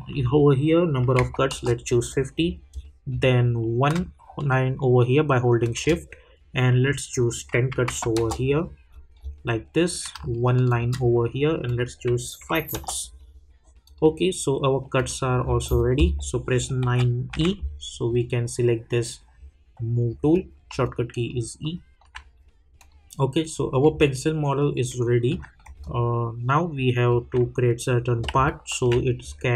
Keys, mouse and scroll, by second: 1.5 Return, 2.4 scroll up 1, 3.9-5.6 scroll up 1, 5.6 shift+click, 8.1 Return, 8.8-9.1 scroll up 2, 10.6 shift+click, 12.7 Return, 13.8 click, 15.4 scroll down 1, 16.8-17.3 typing, 20.3 click, 20.8 alt+click, 21.6 alt+middle click, 22.3 scroll up 1, 22.7 click, 23.5 scroll down 1, 24.0-28.4 alt+drag, 28.4-29.5 alt+drag.